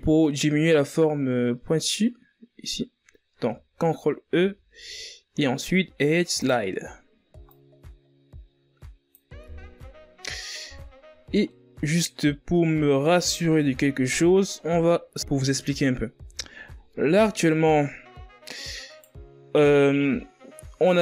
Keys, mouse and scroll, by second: 0.7 ctrl+e, 5.7 Tab, 6.1-6.9 scroll down 5, 6.9 a, 7.8-9.9 middle drag, 9.9 KP_1, 11.2-11.8 scroll up 3, 11.8 right click, 13.7 ctrl+a, 19.5 ctrl+z, 20.7-21.0 scroll down 5.